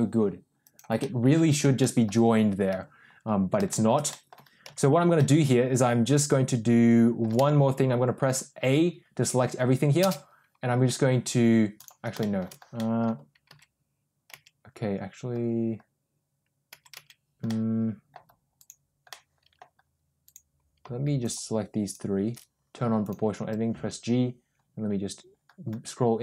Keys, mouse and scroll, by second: 0.9 middle click, 1.7 middle click, 2.6 Tab, 3.5 shift+middle click, 4.0 middle click, 4.5 Tab, 5.0 middle click, 6.3 middle click, 7.2 a, 9.9 space, 12.1 shift+middle click, 12.6 middle click, 13.4 Tab, 14.2 Tab, 16.6 Tab, 16.8 Tab, 17.4 middle click, 18.5 click, 19.0 middle click, 21.1 shift+click, 22.9 click, 23.3 g.